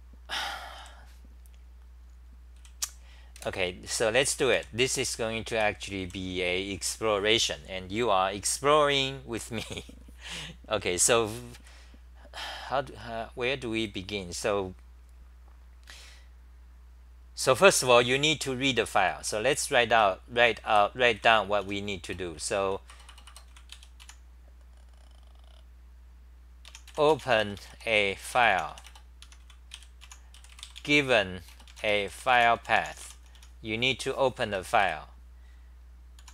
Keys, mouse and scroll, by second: 0.8 w, 3.4 super+w, 4.2 w, 4.5 3, 5.1 w, 11.6 w, 19.0 c, 19.2 c, 19.5 Return, 19.7 Return, 19.9 Return, 20.2-24.5 typing, 22.9 Return, 23.0 Return, 29.2-30.5 typing, 33.0 Home, 33.1 t, 33.3 t, 33.8 h, 34.4 Return, 34.8 ;, 36.2 u.